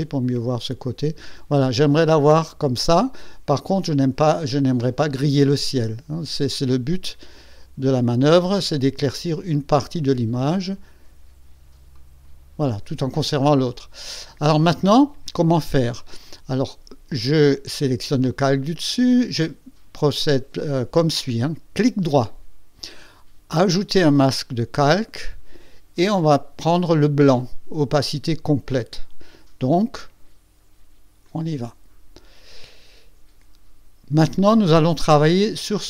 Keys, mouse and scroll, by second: 3.7-5.9 drag, 9.8 click, 11.9 click, 17.7 click, 21.7 right click, 24.2 click, 31.2 click.